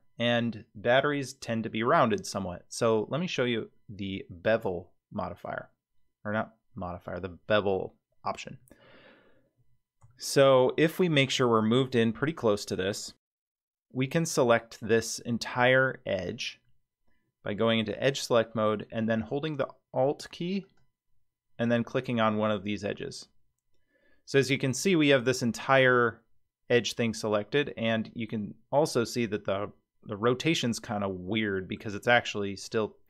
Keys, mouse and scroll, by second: 9.5-10.0 scroll up 2, 10.1-11.3 shift+middle drag, 17.8 click, 20.6 alt+click, 24.5-31.8 middle drag.